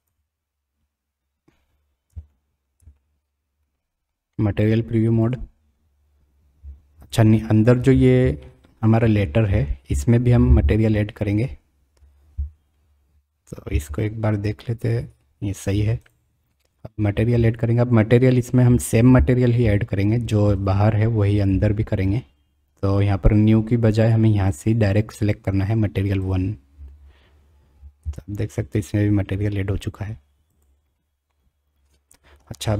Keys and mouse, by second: 0.0 click, 2.3-2.7 shift+drag, 3.1-3.7 drag, 5.2 click, 7.1 click, 8.4-8.8 shift+middle drag, 13.7 g, 28.0 g, 31.5 drag, 31.9 middle click, 32.1 click.